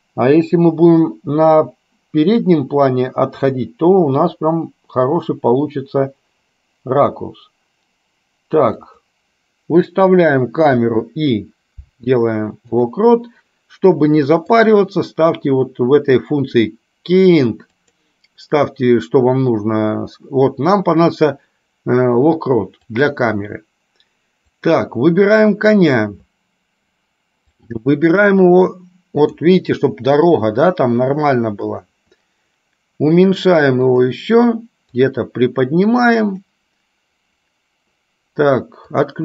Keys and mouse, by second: 14.6-23.2 drag, 23.7 drag, 24.6 click, 27.8-29.7 drag, 35.2-36.8 drag, 39.1 click.